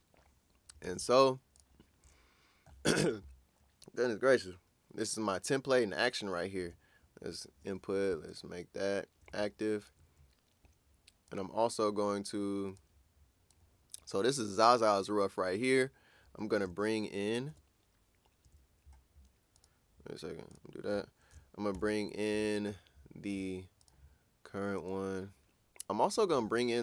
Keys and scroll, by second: 0.8 super+s, 7.2 shift+i, 17.5 shift+super+i, 21.7 shift+super+i.